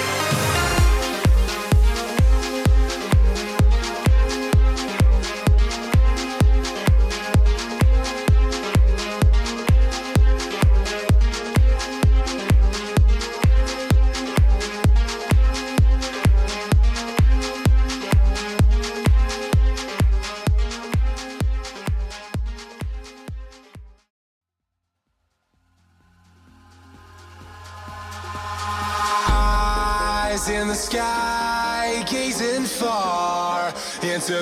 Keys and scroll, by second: 7.9 ctrl+-, 10.0 ctrl+-.